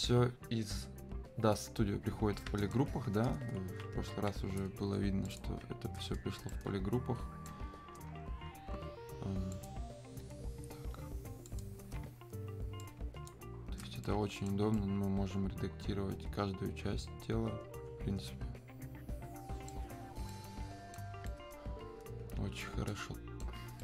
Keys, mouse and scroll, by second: 5.3 shift+click, 6.5-9.5 right drag, 9.5 click, 12.8-14.3 ctrl+shift+drag, 14.0-21.3 right drag, 21.3-23.8 alt+right drag.